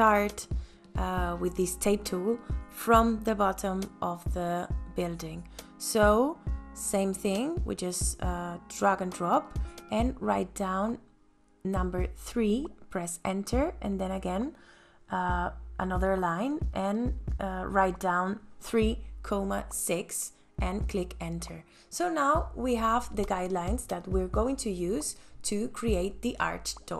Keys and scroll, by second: 5.5 t, 10.8 KP_3, 11.6 KP_Enter, 17.1 ,, 17.9 KP_6, 18.3 KP_Enter, 20.1 space, 22.1 ctrl+s.